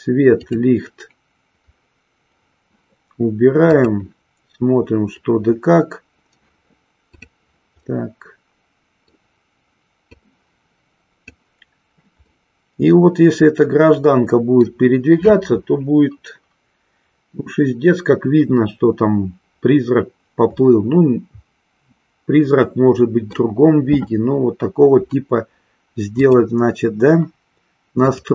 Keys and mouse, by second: 0.8 click, 7.0 click, 8.1-9.4 middle drag, 10.4-11.4 drag, 12.4-14.9 middle drag, 20.6-23.8 middle drag, 26.1 click.